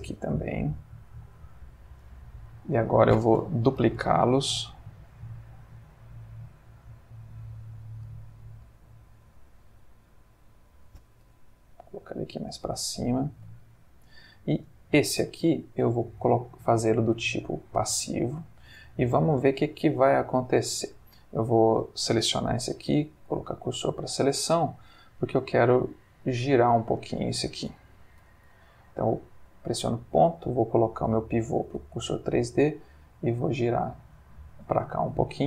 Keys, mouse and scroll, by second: 1.1 click, 2.0-2.7 drag, 3.8 shift+d, 5.1 z, 6.9 click, 9.4 shift+d, 11.3 z, 12.4 click, 13.0 ctrl+middle click, 13.7 ctrl+shift+middle click, 14.7 click, 16.2 click, 17.6 click, 19.7-21.2 drag, 21.6 click, 22.5 shift+s, 23.5 click, 24.3-25.3 drag, 26.6 click, 28.2 ., 31.0 click, 31.8 r, 34.3 click, 35.0-35.4 shift+middle drag.